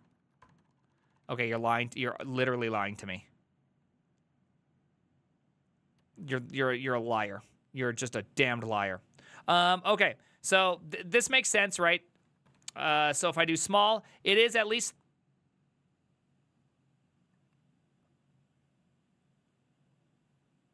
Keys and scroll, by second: 0.0 ctrl+r, 0.5 ctrl+r, 0.6 ctrl+r, 0.8 ctrl+r, 0.9 ctrl+r, 1.0 ctrl+r, 1.2 ctrl+r, 1.3 ctrl+r, 1.7 alt+{, 6.1 alt+{, 10.7 Up, 11.2 ctrl+Left, 11.4 ctrl+Left, 11.6 ctrl+Left, 11.7 ctrl+Left, 11.9 ctrl+Left, 12.0 ctrl+Left, 12.6-13.7 typing.